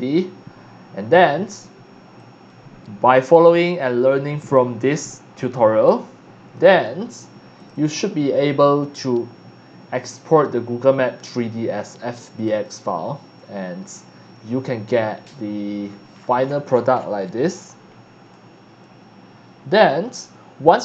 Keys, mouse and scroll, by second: 1.1 click, 2.1 click, 3.2 click, 3.7 click, 5.9 click, 6.8 drag, 7.5 click, 7.7 click, 8.9-9.9 drag, 10.0 click, 11.1 click, 12.3 click, 15.8-17.3 scroll down 6, 17.6 scroll up 1, 18.3-20.2 alt+drag.